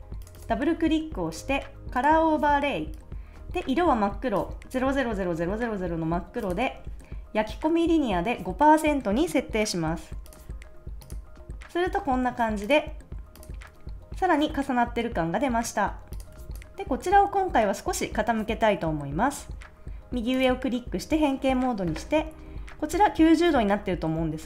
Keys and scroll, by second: 16.4 super+s.